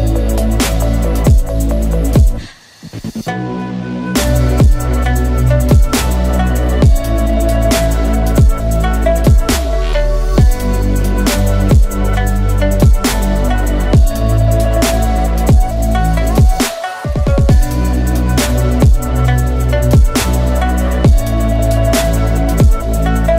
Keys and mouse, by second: 0.9 3, 1.8 i, 3.3 e, 4.4 Tab, 4.8 ctrl+s, 5.4 2, 6.3 q, 8.1 click, 9.3-10.1 drag, 10.5-11.2 drag, 11.8 Tab, 12.8 2, 13.2 click, 14.0-17.9 drag, 18.1 shift+drag, 18.8 ctrl+z, 19.2-19.8 drag, 20.2 3, 21.9-22.8 drag, 23.2 click.